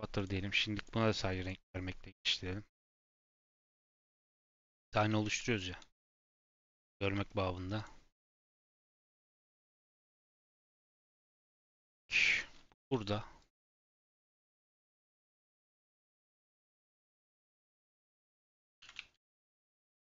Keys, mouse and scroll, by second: 0.7 click, 1.0 click, 1.4 click, 2.0 click, 4.0 middle click, 4.2-4.5 scroll up 1, 5.7 KP_7, 6.0 scroll down 3, 6.9 g, 8.3 middle click, 8.6 g, 9.4 click, 9.6-10.1 middle drag, 10.1-11.2 scroll up 5, 10.4 middle click, 11.2 click, 12.1 KP_7, 12.7 g, 13.5 r, 14.5 shift+middle click, 14.6 scroll up 4, 15.4 click, 15.7 shift+middle click, 16.0-16.4 scroll up 1, 16.4 g, 17.3 shift+middle click, 17.4 scroll up 2, 17.8 shift+middle click, 18.2 g, 18.8 shift+d.